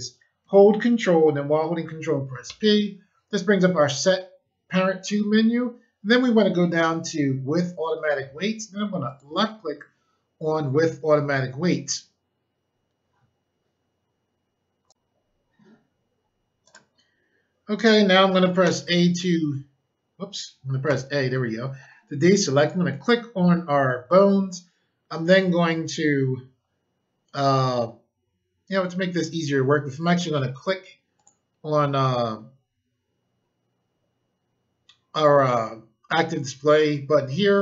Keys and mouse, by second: 2.4 ctrl+p, 9.0 click, 14.9 click, 16.6 click, 18.6 o, 20.8 a, 22.5 click, 31.1 click.